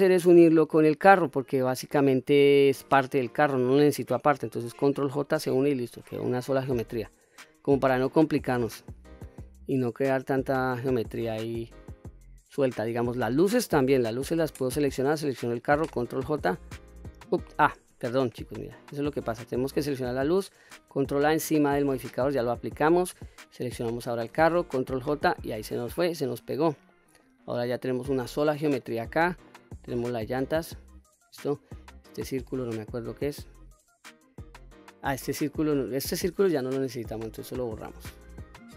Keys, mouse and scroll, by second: 0.4 shift+click, 4.8 ctrl+j, 6.1 click, 6.6 click, 8.1-11.4 middle drag, 12.6 click, 14.9 shift+click, 16.1 ctrl+j, 17.7 ctrl+z, 18.4 click, 19.1 click, 21.4 ctrl+a, 23.3 shift+click, 24.7 ctrl+j, 26.2 click, 26.7 middle click, 27.3 click, 28.6-29.3 middle drag, 29.6 click, 32.5 click, 33.0 click, 35.1 click, 36.9 Delete, 38.0-38.5 middle drag.